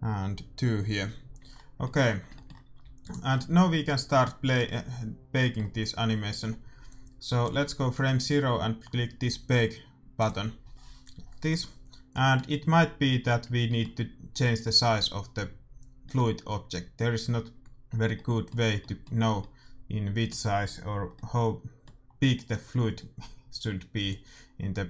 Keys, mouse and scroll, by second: 1.5-3.0 middle drag, 2.8 a, 3.0-4.9 right drag, 3.7 middle click, 5.3-6.9 middle drag, 6.9-8.6 drag, 10.1 click, 10.7-18.0 middle drag, 18.1-24.0 middle drag, 24.2-24.8 drag.